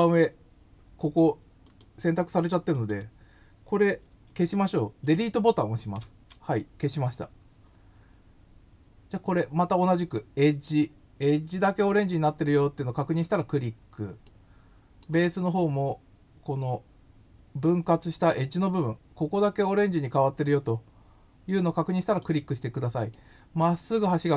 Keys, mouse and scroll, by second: 1.7 click, 2.7 click, 13.2 click, 14.2 middle click, 22.0 click, 23.1-24.1 middle drag.